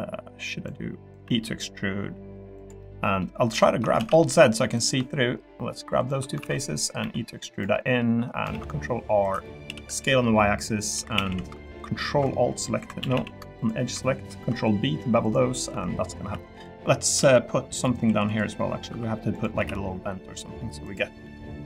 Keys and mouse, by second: 1.2 e, 2.5 click, 2.8 middle click, 3.6 shift+middle click, 4.0 alt+z, 4.1 middle click, 6.0 shift+click, 6.4 alt+z, 6.5 middle click, 7.0 e, 7.5 click, 7.7 middle click, 8.5 ctrl+r, 9.6 s, 9.8 y, 10.8 click, 10.9 3, 11.1 a, 11.3 a, 11.6 ctrl+alt+click, 12.8 2, 13.0 a, 13.1 a, 13.6 ctrl+alt+click, 14.4 ctrl+b, 15.7 Tab, 16.0 middle click, 16.1 click, 16.5 Tab, 16.5 click, 17.3 r, 18.0 3, 18.3 click, 18.9 i, 19.5 s, 20.8 click, 21.2 e.